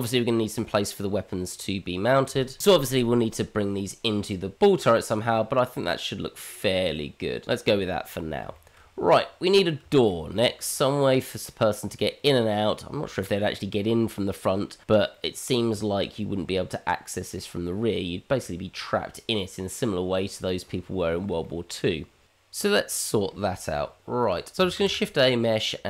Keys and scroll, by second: 6.6 g, 24.7 shift+a.